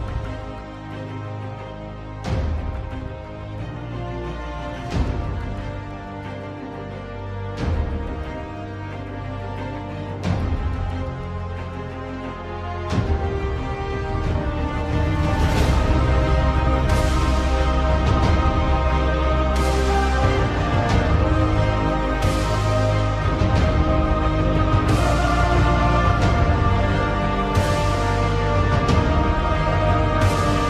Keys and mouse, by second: 0.1 Tab, 1.6 KP_1, 3.3 s, 6.4 KP_7, 8.5 z, 11.2 3, 12.8 click, 17.2 x, 18.8 2, 21.0 middle click, 22.3 click, 23.1 shift+click, 24.1 f, 26.5 middle click, 27.9 f, 28.3 middle click, 29.3 f.